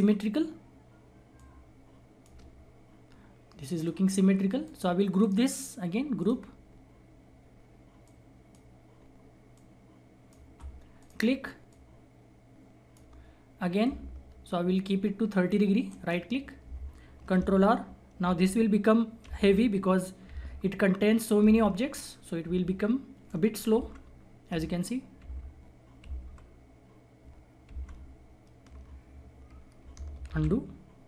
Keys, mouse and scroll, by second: 0.5-1.3 scroll up 1, 1.3-3.0 drag, 3.0-3.7 scroll down 1, 3.7 click, 5.1 right click, 6.1 click, 6.8 scroll down 1, 8.0 click, 8.9-9.5 scroll up 1, 9.5-15.8 drag, 15.8 ctrl+right click, 17.3 ctrl+r, 30.2 ctrl+z.